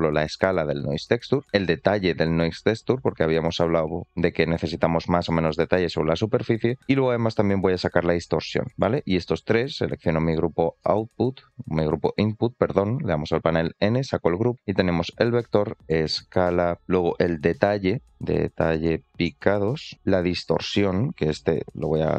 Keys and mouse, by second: 2.0-6.5 drag, 7.7-8.6 drag, 13.8 click, 15.6-16.8 drag, 17.2 click, 17.5-19.9 drag, 20.5-22.1 drag.